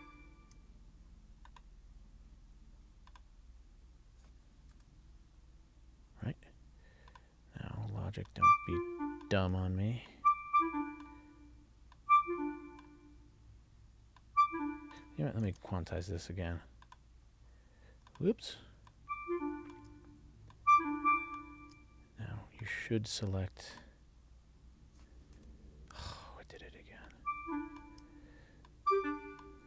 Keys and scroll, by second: 1.7 alt+shift+Down, 15.6 super+a.